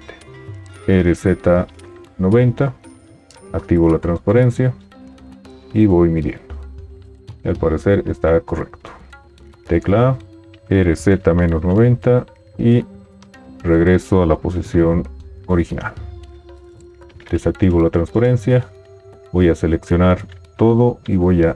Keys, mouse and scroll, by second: 0.8 r, 3.5 alt+z, 9.5 a, 14.1 g, 17.3 alt+z, 20.7 a.